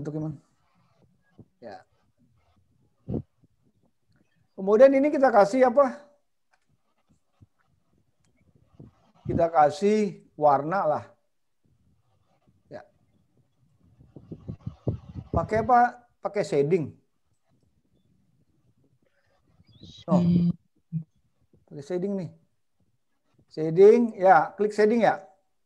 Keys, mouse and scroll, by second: 0.7-1.8 scroll up 2, 1.8 scroll down 4, 3.8 click, 19.6 click, 22.0-22.7 scroll up 3, 22.7 scroll down 2.